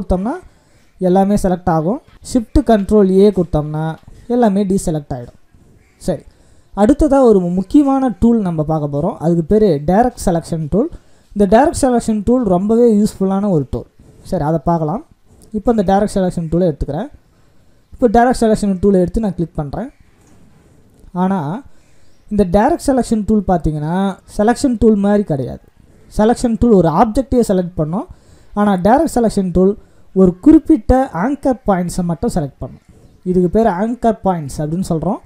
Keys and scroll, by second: 2.1 ctrl+shift+a.